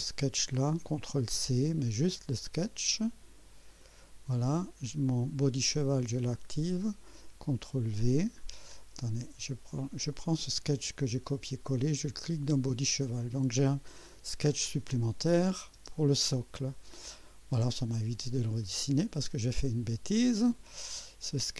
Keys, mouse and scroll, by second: 1.1 ctrl+c, 2.6 click, 3.7 click, 4.3-4.6 scroll up 2, 5.7 right click, 6.3 click, 7.5 ctrl+v, 8.4-9.0 ctrl+scroll down 5, 10.1-12.7 drag, 14.4 space, 15.3 click, 15.7 space, 16.9 scroll up 2, 17.6 scroll up 2, 18.2 right click.